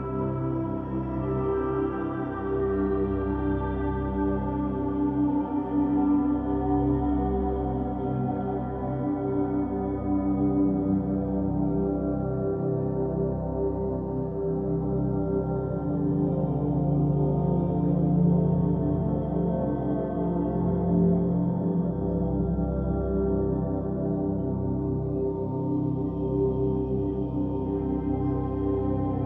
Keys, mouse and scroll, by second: 1.7 scroll up 2, 2.6-5.0 shift+middle drag, 5.0 s, 6.6 Tab, 8.2-11.3 middle drag, 12.2 Tab, 13.5 ctrl+z, 14.9 ctrl+z, 17.0-20.0 middle drag, 21.8 click, 25.3-28.3 drag.